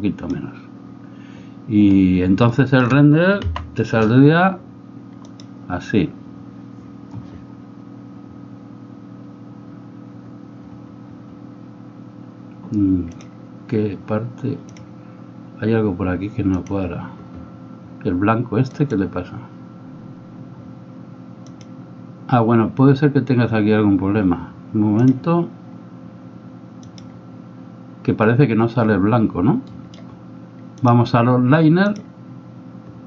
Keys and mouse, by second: 2.6 shift+middle click, 5.5 F12, 29.9-30.9 middle drag, 30.9-32.1 drag.